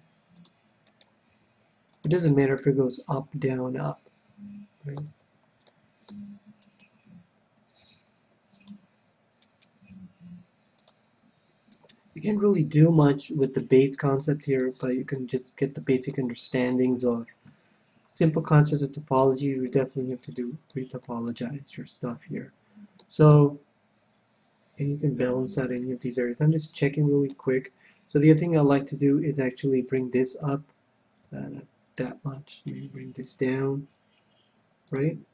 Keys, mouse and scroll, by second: 0.3 g, 1.6-4.3 drag, 1.6-3.0 right drag, 1.7 g, 2.7-4.3 middle drag, 4.4 middle click, 6.1-7.8 middle drag, 7.1-9.0 right drag, 8.3 g, 9.2-10.7 drag, 9.9 right click, 10.4 g, 11.0 right click, 11.6 click, 12.6 g, 13.0 right click, 13.3-14.6 drag, 13.5 a, 14.0-18.5 middle drag, 17.3 KP_1, 19.3-23.3 middle drag, 23.8-25.5 middle drag, 27.8 KP_1, 28.7-30.6 right drag, 29.7 g, 30.6-32.1 drag, 31.7 g, 32.6-34.3 drag, 33.8-35.3 right drag, 34.3 g.